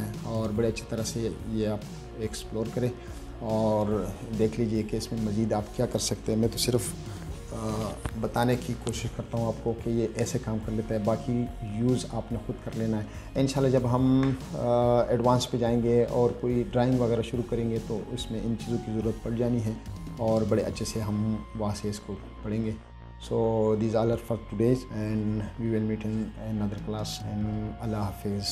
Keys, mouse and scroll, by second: 0.2 middle click.